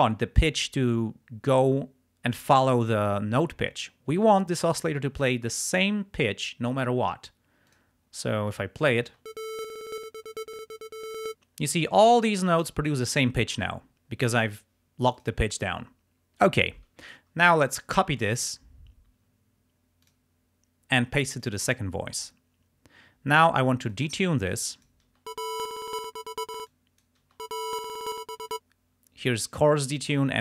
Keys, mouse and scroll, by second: 7.7 click, 8.6 click, 9.3 space, 11.4 space, 15.0 click, 18.2 click, 20.1 click, 21.4 click, 23.9-25.1 drag, 25.2 space, 26.5 space, 26.7 click, 27.3 space, 28.4 space.